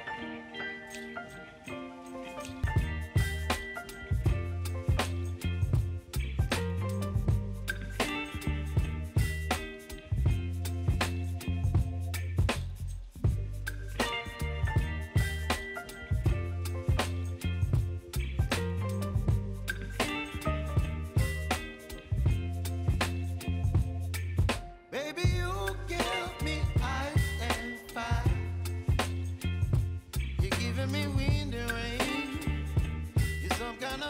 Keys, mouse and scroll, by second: 7.6 ctrl+alt+Home, 9.8 ctrl+t, 10.3 click, 18.0-21.1 drag, 21.1 ctrl+c, 22.6 click, 25.2 ctrl+v, 26.3 ctrl+a, 27.7-34.0 drag.